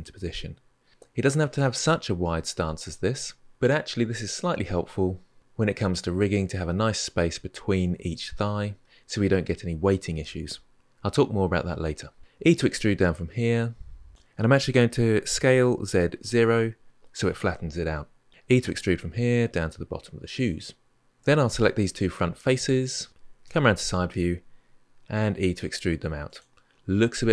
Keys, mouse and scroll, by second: 0.0 g, 12.2 e, 15.1 s, 18.4 e, 21.0 3, 21.3 click, 22.2 shift+click, 23.2 KP_3, 24.9 e.